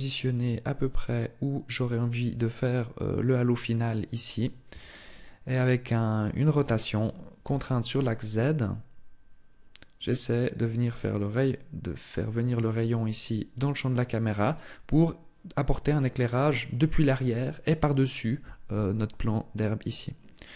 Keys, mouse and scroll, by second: 1.8 click, 14.3 click.